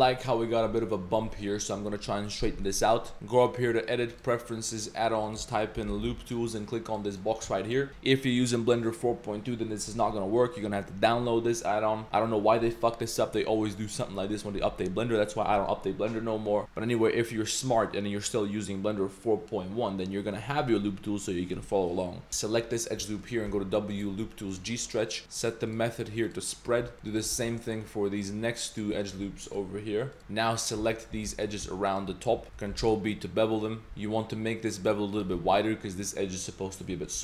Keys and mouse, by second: 0.1 middle click, 0.9-1.8 middle drag, 2.6 middle click, 3.1 Tab, 3.5-4.3 drag, 13.8 middle click, 22.7 ctrl+click, 23.0 middle click, 23.5 w, 25.4 click, 25.7-26.4 drag, 27.1 ctrl+click, 27.3 w, 28.7 click, 29.4 w, 30.2 3, 30.2 z, 30.2 2, 30.9 alt+shift+click, 31.9 alt+shift+click, 32.7 ctrl+b, 35.3 Tab, 35.6 click, 36.8 drag.